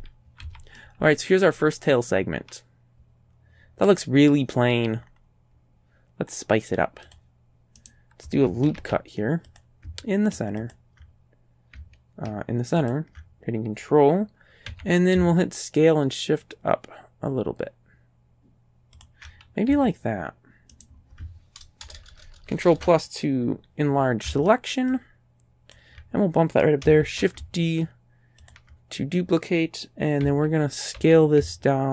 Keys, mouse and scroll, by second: 0.5 a, 0.8-4.5 drag, 4.7-5.3 scroll down 1, 7.1 click, 7.8 right click, 8.8 ctrl+r, 9.5 click, 12.8 ctrl+click, 14.7 s, 19.0 ctrl+click, 19.7 ctrl+a, 20.8 right click, 21.9 ctrl+KP_Add, 22.0 ctrl+KP_Add, 25.0 ctrl+click, 27.0 shift+d, 28.5 ctrl+click, 30.3 s, 31.2 s.